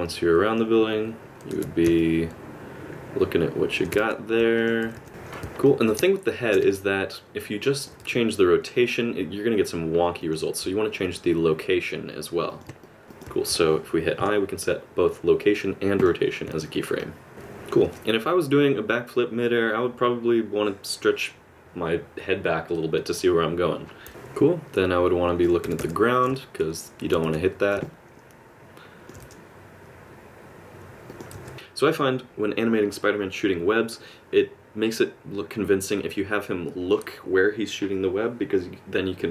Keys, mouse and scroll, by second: 1.5 alt+r, 1.9 middle click, 4.0 r, 4.8 r, 5.1 ctrl+z, 5.1 click, 5.6 middle click, 6.3 shift+middle click, 6.7 middle click, 8.0 r, 11.0 g, 12.8 middle click, 13.0 shift+middle click, 13.0 r, 14.2 i, 17.0 middle click, 17.3 click, 17.3 space, 24.1 alt+space, 24.1 middle click, 25.6 r, 26.3 middle click, 27.2 g, 27.8 middle click, 29.2 g, 31.3 r.